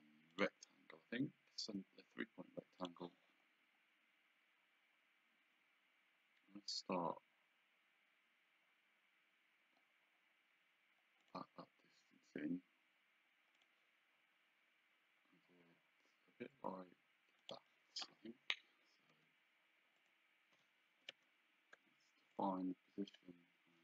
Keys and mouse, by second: 2.9 click, 11.3 click, 13.6 click, 17.5 click, 19.2 d, 20.1 click, 21.0 Escape, 21.8 d, 22.4 click.